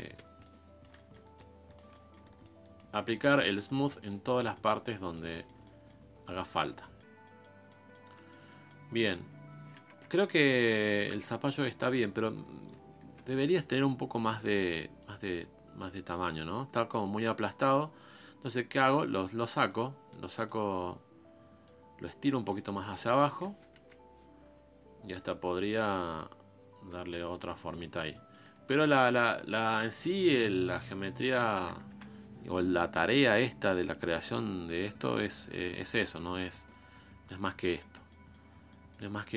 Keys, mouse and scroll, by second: 0.4 shift+click, 1.0 middle click, 1.3 shift+click, 1.9 middle click, 2.4 shift+click, 3.1-4.7 middle drag, 4.7 scroll down 1, 4.9-6.1 middle drag, 6.1 scroll up 1, 6.3 middle click, 6.7 scroll down 1, 6.8 middle click, 7.2-7.7 scroll up 1, 7.7-9.3 middle drag, 9.3 scroll down 1, 9.8 KP_1, 10.5-10.8 scroll up 4, 10.8 shift+middle click, 11.1 scroll down 2, 11.7 scroll up 1, 13.1 f, 15.0-19.1 drag, 19.1-19.6 scroll up 2, 19.8-21.0 drag, 21.0-21.7 scroll down 3, 21.7-22.8 drag, 22.8-23.8 middle drag, 23.8 KP_1, 24.3-25.2 scroll up 2, 25.2-27.9 drag, 27.9 scroll down 2, 28.1 middle click, 29.0 scroll up 2, 29.2 middle click, 29.7-30.2 scroll up 1, 30.2 scroll down 1, 30.4 middle click, 30.8 scroll up 2, 31.0 middle click, 31.9 KP_1, 32.3-32.8 scroll down 2, 32.8 shift+middle click, 33.4-34.5 drag, 34.5-35.0 scroll up 1, 35.0-37.4 drag, 37.4 scroll down 3, 37.6 middle click, 38.4 scroll up 1, 38.7 middle click, 39.1 scroll down 1, 39.2 middle click.